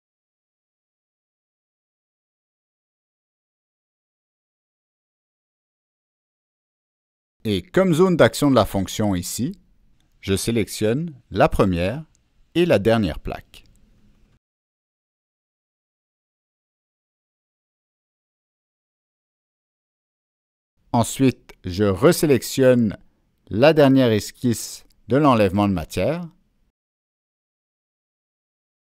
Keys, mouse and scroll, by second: 0.3 click, 0.7-1.4 scroll up 2, 1.5-2.2 scroll down 2, 2.8 click, 4.0 click, 4.4 scroll up 1, 6.1 click, 8.0 click, 9.2-9.5 scroll up 1, 9.3 click, 10.6 middle click, 10.6 click, 12.2 click, 12.4 middle click, 12.9 click, 14.5 click, 20.8 click, 23.7 Escape, 23.7 click, 25.3 Escape, 25.3 click, 27.7 Escape, 27.9 click, 28.7 click.